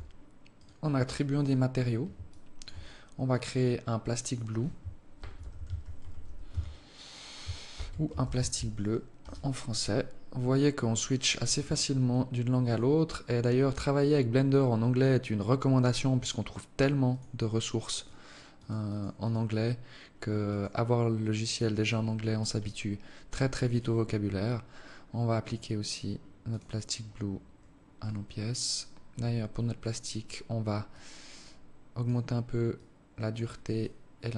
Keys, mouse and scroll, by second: 0.3 right click, 1.1 right click, 2.0 alt+shift+click, 3.0 click, 11.4-11.8 scroll down 3, 12.4 click, 22.4 alt+click, 23.3 right click, 24.2-25.0 scroll up 6, 25.0 click, 27.7 right click, 28.9-29.3 scroll down 3, 30.6 click, 32.4 click, 33.4 click.